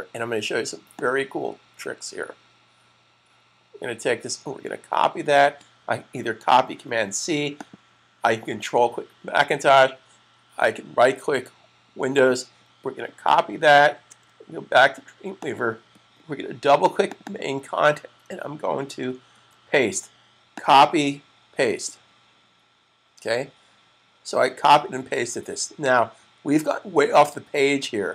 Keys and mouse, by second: 0.7 click, 7.4 ctrl+click, 11.9 click, 13.9 super+Tab, 15.0 click, 17.1 double click, 19.1 super+v, 20.4 double click.